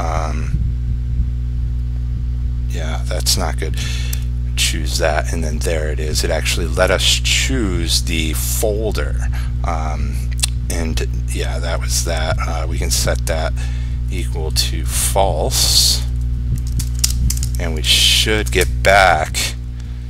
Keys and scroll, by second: 17.9 ctrl+s, 18.6 ctrl+r.